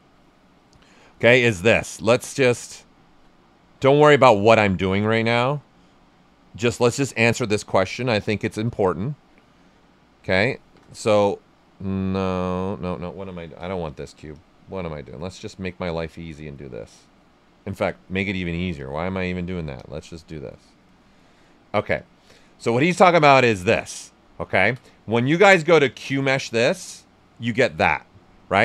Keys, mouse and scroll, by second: 10.5 shift+f, 12.1-13.5 drag, 13.5 w, 14.3 click, 17.7 w, 18.7 click, 20.5 right click, 21.9 click, 22.8 right click, 23.4 q, 24.2 right click, 26.4-28.1 drag, 28.1-28.6 right drag.